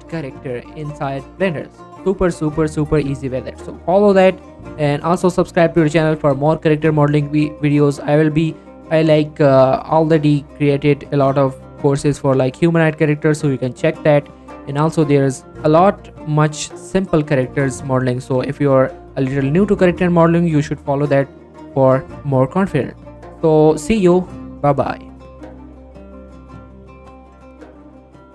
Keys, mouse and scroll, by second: 0.1-2.1 middle drag, 2.4 scroll down 1, 2.6 middle click, 2.8-3.6 scroll up 1, 8.3 scroll down 1, 8.5 middle click, 8.9-9.9 scroll up 1, 10.0-12.6 middle drag, 15.7 scroll down 1, 15.9 middle click, 16.3 click, 16.5 middle click, 16.9 click, 21.6 click, 26.0 click.